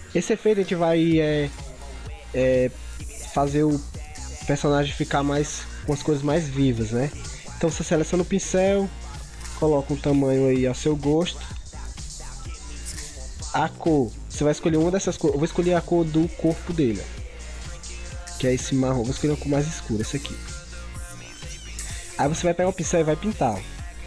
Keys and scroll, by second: 2.5 ctrl+0, 2.9 ctrl+-, 3.4 ctrl+0, 4.2 ctrl+=, 4.7 ctrl+0, 4.9 ctrl+=, 5.2 ctrl+0, 12.6 ctrl+z.